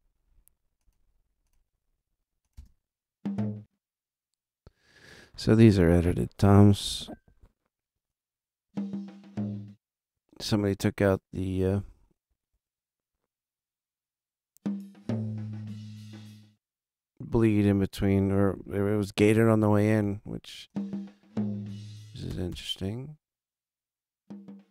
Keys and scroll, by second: 2.5 space, 22.2 space.